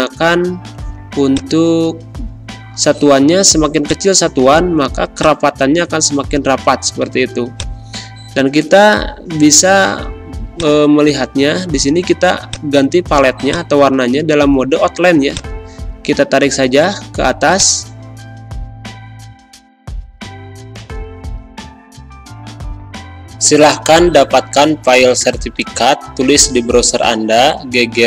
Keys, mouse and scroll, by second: 3.0 1, 3.8 click, 10.5-17.5 drag.